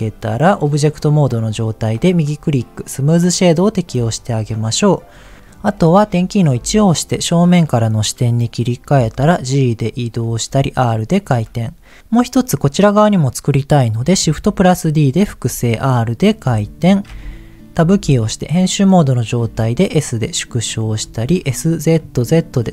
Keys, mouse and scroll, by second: 2.0-3.7 right drag, 5.3 middle click, 6.5 KP_1, 8.9 g, 9.7 click, 10.2 r, 11.1 click, 14.1 shift+d, 15.1 click, 15.4 r, 16.1 click, 16.4 g, 16.6 click, 17.7 Tab, 19.4 s, 20.6 click, 21.0 s, 21.2 z, 21.9 z.